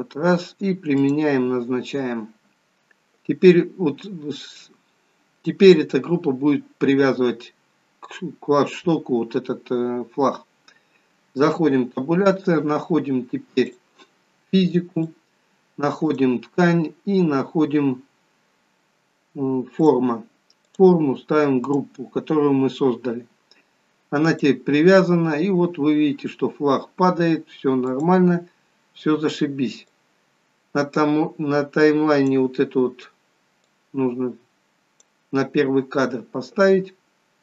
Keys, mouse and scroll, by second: 0.9 click, 11.5 Tab, 13.6 click, 14.9 click, 16.0 click, 17.1-18.0 scroll down 1, 18.0-19.0 scroll down 9, 19.8 click, 20.6 click, 24.1 click, 27.9 click, 29.8 click, 31.7 click, 33.7 click.